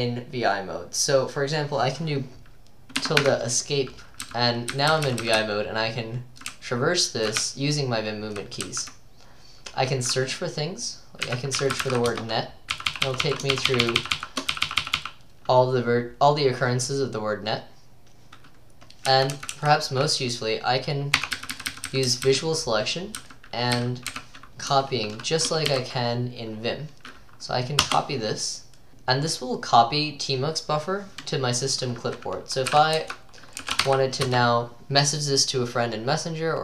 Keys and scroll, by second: 3.0 `, 3.2 Escape, 4.3-8.7 typing, 11.0-15.0 typing, 19.1 j, 19.3 j, 19.6 j, 21.2-24.5 typing, 25.7-27.9 typing, 32.7-34.3 typing.